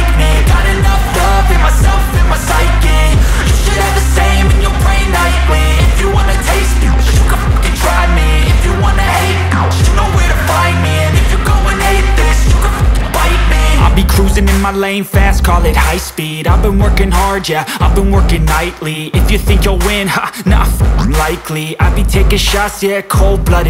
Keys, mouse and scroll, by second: 0.8 scroll up 1, 2.0-5.3 drag, 5.7 scroll up 1, 6.3 click, 9.5 scroll down 1, 10.0-10.8 scroll up 1, 11.1 click, 17.9-19.6 scroll down 1, 19.6-22.1 drag.